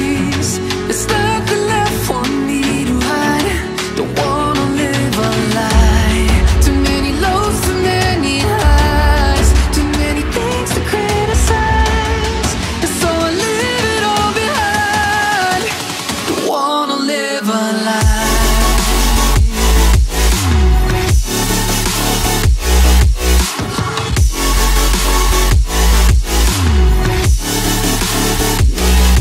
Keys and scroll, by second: 10.4 ctrl+-, 17.7 ctrl+c, 18.0 ctrl+b.